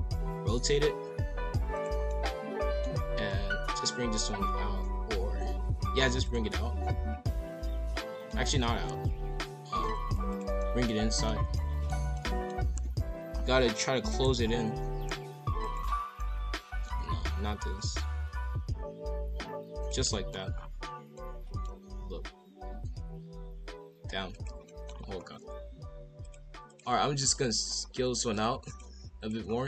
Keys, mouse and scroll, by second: 2.1-3.1 middle drag, 3.1 s, 6.5-8.9 middle drag, 8.9 s, 10.6-12.6 middle drag, 12.6 KP_5, 12.7 KP_1, 13.0 KP_7, 13.2 scroll up 3, 13.6 e, 14.4 ctrl+z, 14.8 r, 16.1 scroll down 1, 16.2 middle click, 16.9 KP_5, 17.0 KP_1, 17.2 KP_7, 17.7 scroll up 1, 17.8 r, 20.1 middle click, 20.3-21.1 scroll down 3, 21.1 middle click, 21.8 s, 24.6 middle click, 24.8-26.2 scroll up 4, 26.2-27.4 drag, 27.8 scroll up 1, 28.3 click, 28.7-29.4 drag, 29.4 scroll down 4.